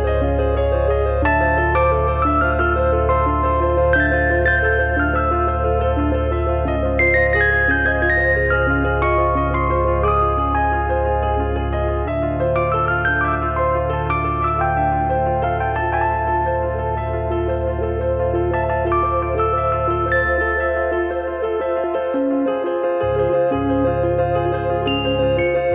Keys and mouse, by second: 1.4 click, 2.0 click, 2.4 f, 2.7 click, 4.0 f, 4.5 click, 4.8 click, 5.3 f, 5.9 click, 8.6 r, 9.5 click, 10.8 click, 11.2 f, 11.6 click, 12.0 click, 12.7 f, 13.3 alt+click, 14.0 g, 15.9 click, 16.1 middle click, 17.1 click, 17.7 click, 18.3 click, 19.1 middle click, 19.5 click, 19.6 middle click, 21.4 middle click, 22.5 click, 23.6 click, 24.7 click.